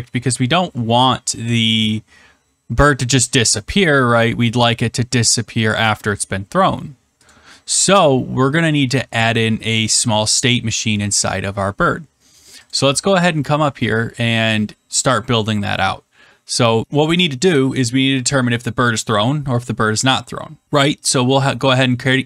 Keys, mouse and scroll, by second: 7.2 click, 10.7 click, 12.6 click, 21.9-22.2 typing.